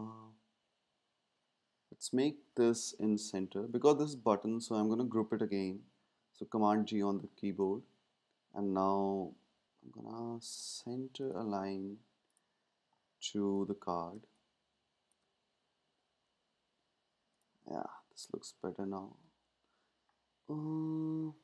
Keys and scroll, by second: 2.9 shift+Left, 6.5 super+g.